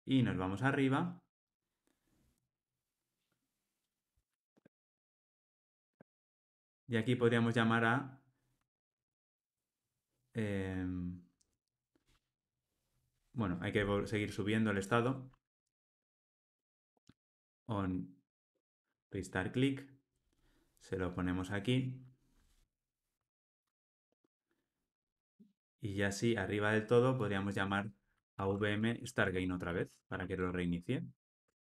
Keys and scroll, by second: 17.8 Escape, 19.0 Tab, 23.7 Tab, 31.4 Tab.